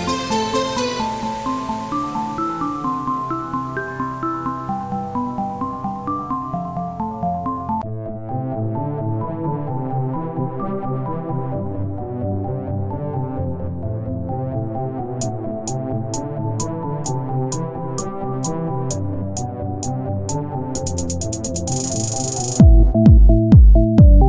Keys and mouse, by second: 1.0-3.6 drag, 3.6 Tab, 4.1 z, 4.4 c, 4.8 z, 6.0 click, 6.8 click, 9.1 Tab, 12.8 r, 13.9 Tab, 15.1 Tab, 15.5 click, 16.7-18.9 drag, 18.9 KP_1, 19.4 z, 22.4 z, 23.5 z.